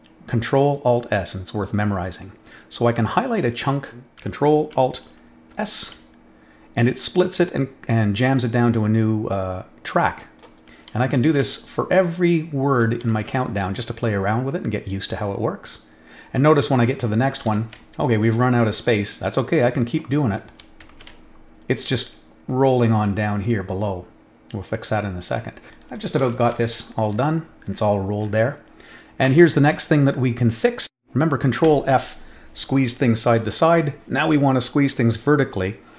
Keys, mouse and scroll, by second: 1.6 click, 2.4-4.1 drag, 9.5-10.3 drag, 11.1 ctrl+alt+s, 12.1-12.7 drag, 13.1 ctrl+alt+s, 16.7-17.2 drag, 17.6 ctrl+alt+s, 19.3 click, 20.9 ctrl+alt+s, 22.0 middle click, 22.4 middle click, 22.4 scroll down 1, 23.4 middle click, 25.7 click, 25.8 click, 26.3 ctrl+alt+s, 27.1 middle click, 27.1 scroll down 1, 27.7 middle click, 28.3 middle click, 29.2 click, 31.6 ctrl+f.